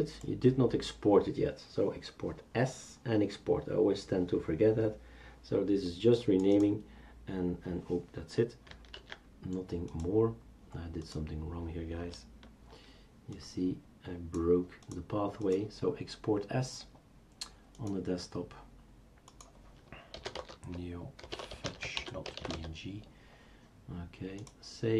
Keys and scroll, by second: 9.0 ctrl+z, 19.9-23.1 typing.